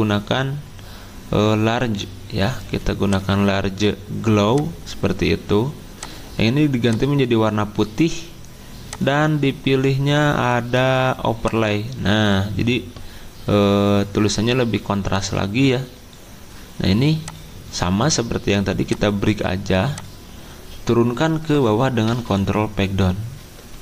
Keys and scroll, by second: 22.1 ctrl+Page_Down, 22.2 ctrl+Page_Down, 23.4 ctrl+Page_Up, 23.7 ctrl+Page_Up.